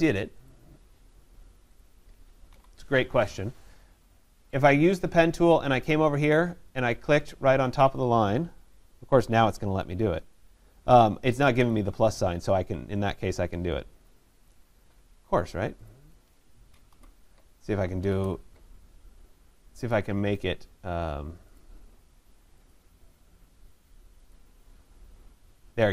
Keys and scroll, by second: 2.5 Delete, 16.8 Delete.